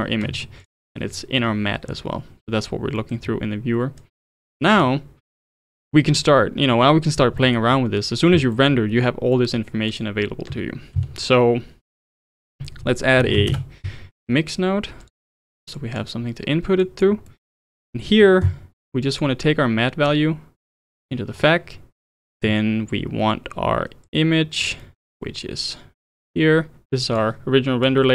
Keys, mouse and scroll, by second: 0.6 ctrl+shift+click, 3.0 middle click, 3.2 scroll down 3, 4.0 click, 4.7 click, 5.4 click, 7.4-9.9 middle drag, 9.9 click, 10.9 shift+a, 15.3-15.8 middle drag, 15.8 click, 16.8 click, 17.3-17.6 middle drag, 17.6-19.0 scroll up 1, 19.0 click, 20.1 click, 21.7-22.2 middle drag, 22.2 click, 24.1 click, 24.8-26.0 middle drag, 26.0 click, 27.8 click.